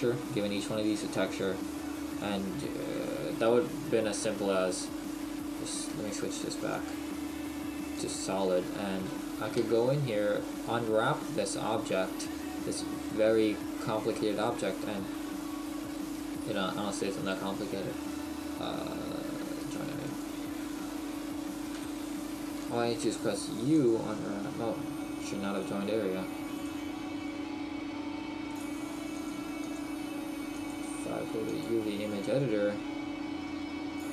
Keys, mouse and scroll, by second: 3.1 right click, 6.7 click, 8.5-9.0 scroll up 3, 9.0 shift+middle click, 9.6 Tab, 10.2 middle click, 14.4 middle click, 14.8 middle click, 14.8-16.1 scroll down 1, 16.1-16.4 scroll down 2, 19.7 right click, 20.9 middle click, 21.7 KP_1, 23.0 u, 25.5 right click, 29.6 right click, 33.0-33.6 scroll down 5.